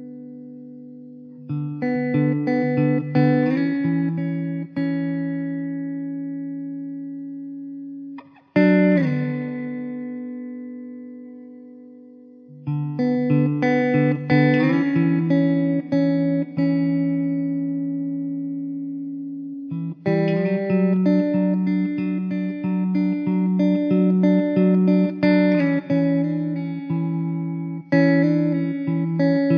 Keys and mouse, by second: 0.1 middle click, 3.3-4.4 typing, 6.5 e, 8.4 ctrl+z, 10.9 w, 13.5 e, 14.9 w, 20.0 middle click, 26.8 middle click, 29.1 middle click.